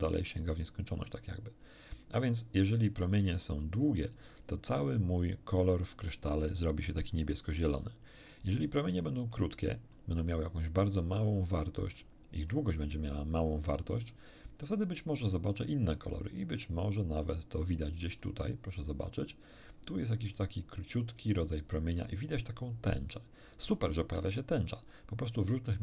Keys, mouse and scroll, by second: 2.7-4.0 drag, 9.3 middle click, 10.6 middle click, 11.5 middle click, 12.0-13.3 middle drag, 13.4 scroll up 1, 14.0 scroll up 1, 14.7 middle click, 16.6 click, 17.8 click, 18.7 click, 19.6-20.4 scroll up 3.